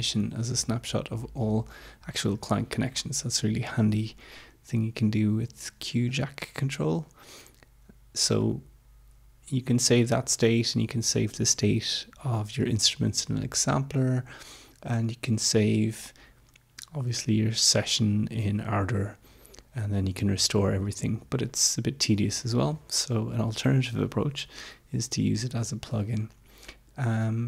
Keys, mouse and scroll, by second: 6.0 click, 8.5 click, 27.2 click.